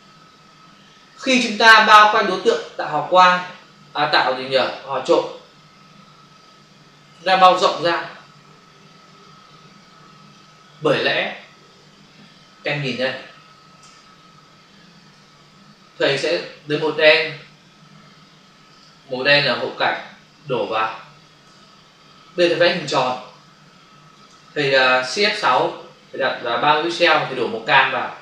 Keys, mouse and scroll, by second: 2.7 click, 13.0 ctrl+n, 13.8 Return, 15.2 f, 16.7 click, 18.1 Escape, 18.6 click, 19.6 click, 20.6 click, 21.4 ctrl+BackSpace, 22.7 m, 23.2 shift+click, 25.3 shift+F6, 27.0 Return.